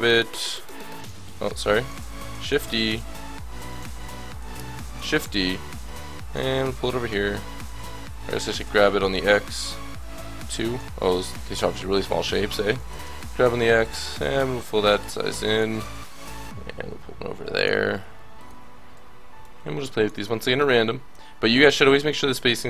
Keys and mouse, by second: 1.2 ctrl+z, 1.6-3.6 drag, 2.0 ctrl+z, 2.4 shift+d, 3.8 ctrl+z, 3.8-6.6 drag, 4.8 shift+d, 7.2 ctrl+z, 7.7 g, 11.7 middle click, 12.8 shift+d, 15.7 shift+d, 17.9 a, 18.4-19.4 drag, 18.9 l, 20.3 middle click, 20.4 a, 21.1 l, 21.4 middle click, 22.4-22.6 middle drag.